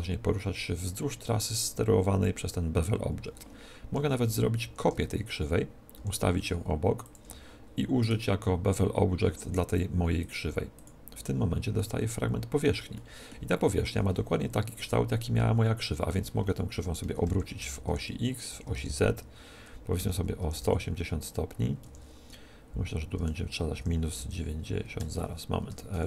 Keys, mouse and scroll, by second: 4.6 shift+d, 7.0 click, 7.9-9.0 middle drag, 9.0 right click, 10.1-11.8 drag, 11.7-15.1 middle drag, 14.7-16.7 right drag, 16.0 r, 17.8 r, 23.1 r, 25.6 r.